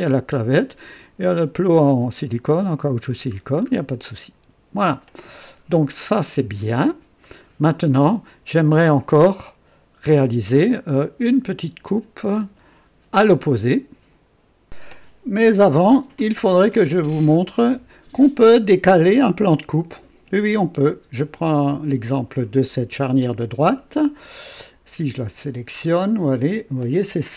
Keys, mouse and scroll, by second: 1.9-3.2 drag, 3.3 scroll down 1, 4.0-5.1 drag, 7.2-7.9 right drag, 21.5 click, 22.6-24.2 drag, 25.8 click.